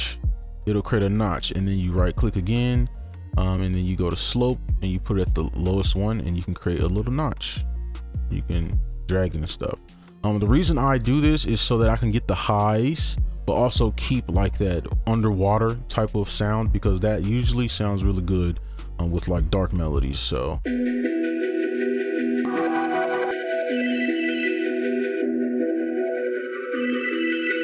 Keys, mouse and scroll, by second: 1.8 right click, 7.0 scroll down 1, 7.4 scroll up 1, 7.7 scroll down 1, 7.8 scroll up 1, 7.9 scroll down 1, 8.1 scroll up 1, 8.2 scroll down 1, 8.4 scroll up 1, 8.6 scroll down 1, 8.7 scroll up 1, 8.9 scroll down 1, 9.1 scroll up 1, 9.2-9.5 scroll down 1, 9.6-10.1 scroll up 1, 10.1 scroll down 1, 10.4 right click, 20.6 space.